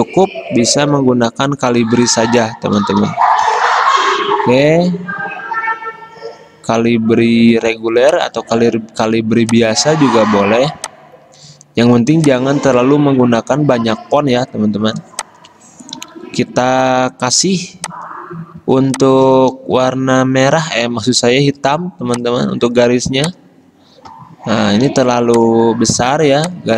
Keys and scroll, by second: 0.7-1.4 typing, 2.8-3.6 typing, 16.2 typing, 17.3-18.0 typing, 19.9 d, 25.1 v.